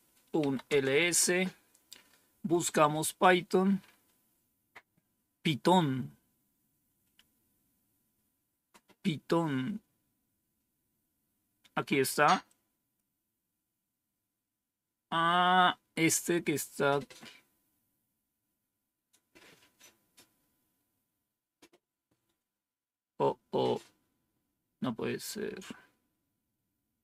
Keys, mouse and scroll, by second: 0.0-0.9 typing, 6.7-7.5 scroll up 2, 7.5-12.3 scroll up 1, 12.3 click.